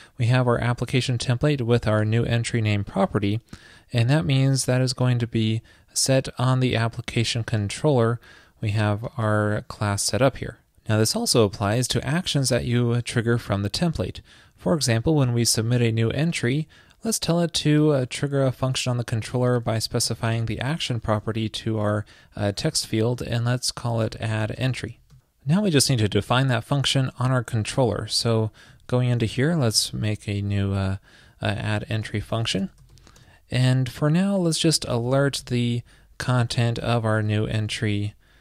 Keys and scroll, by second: 29.1 super+Right.